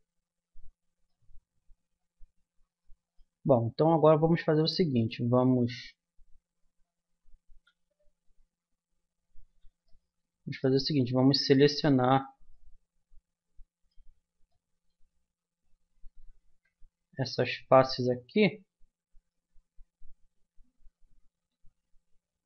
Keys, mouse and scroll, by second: 3.5-4.9 middle drag, 4.4 Tab, 7.6-9.9 middle drag, 7.8 z, 11.3-12.7 middle drag, 16.2 middle click, 16.5 a, 17.0-19.9 drag, 21.3 c.